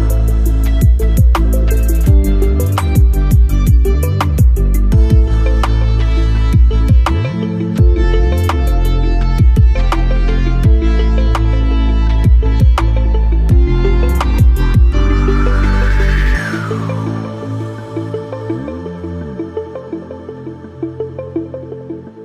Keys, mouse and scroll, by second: 2.7 click, 4.6 scroll down 1, 4.9 alt+middle click, 5.7 scroll up 1, 7.0 alt+click, 7.6 alt+middle click, 7.7 alt+middle click, 7.7 alt+scroll up 1, 9.8-22.2 drag.